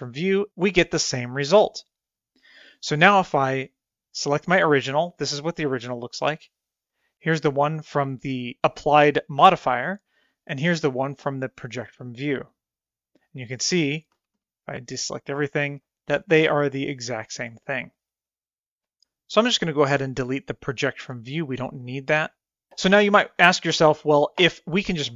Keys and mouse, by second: 11.5 click, 13.4 click, 14.2 a, 14.4 a, 15.9 click, 17.1 click, 17.7 click, 18.3 click.